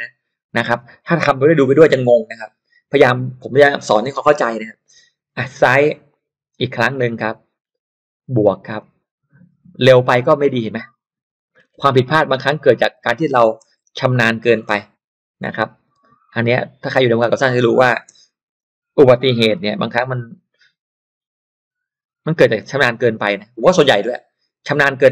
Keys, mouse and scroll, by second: 6.1 click, 7.1 click, 8.8-11.7 drag, 11.7 8, 13.1-16.5 typing, 17.3 click, 17.8-19.6 typing, 22.2 click, 23.7 click.